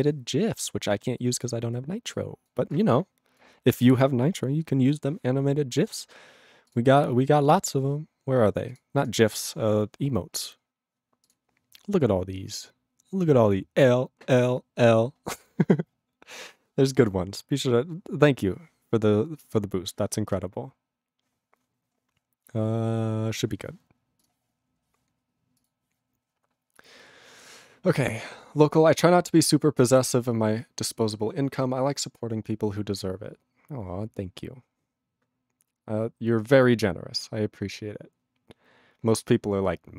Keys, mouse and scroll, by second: 24.3 ctrl+p, 25.6 click, 25.6 click.